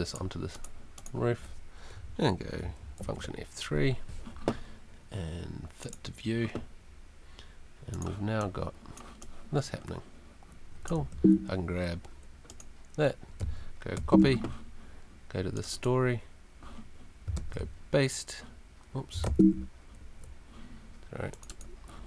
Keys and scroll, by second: 3.0 super+F3, 3.7 F3, 11.1 Escape, 14.0 super+c, 17.4 super+v, 19.2 super+z.